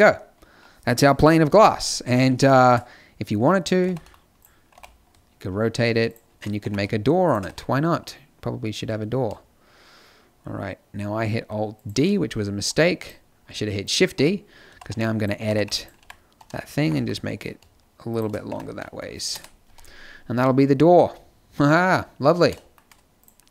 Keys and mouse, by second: 1.2 KP_7, 1.4 z, 3.8 alt+d, 4.6 r, 6.5 r, 7.4 g, 12.9-15.5 drag, 14.1 Tab, 14.6-16.7 typing, 18.4 Tab, 19.2 KP_0, 19.6 z, 20.3 a.